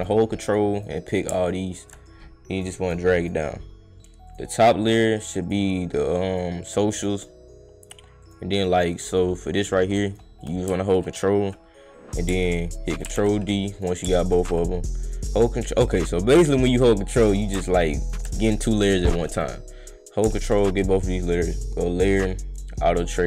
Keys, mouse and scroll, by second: 0.5 click, 0.7 click, 1.1 click, 1.4 ctrl+click, 2.0 click, 3.2 click, 4.3 click, 4.5 click, 5.4 click, 5.8 click, 6.9 click, 7.1 click, 7.8 click, 8.2 click, 8.5 click, 9.1 click, 9.5 click, 10.1 click, 10.4 click, 10.8 ctrl+click, 13.0 ctrl+d, 13.7 click, 14.3 ctrl+click, 15.3 click, 17.2 click, 18.0 ctrl+click, 19.3 click, 20.2 click, 20.2 right click, 20.5 ctrl+right click, 21.4 right drag, 22.5 click.